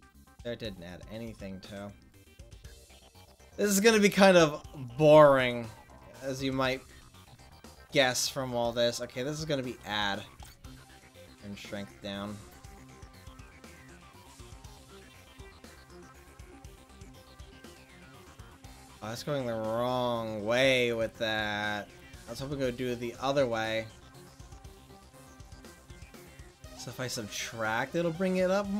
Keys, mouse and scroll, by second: 2.2-3.8 drag, 5.8-10.1 drag, 13.2-18.1 drag, 22.7 ctrl+z, 23.4 ctrl+z, 24.6 ctrl+z, 27.3-28.7 drag.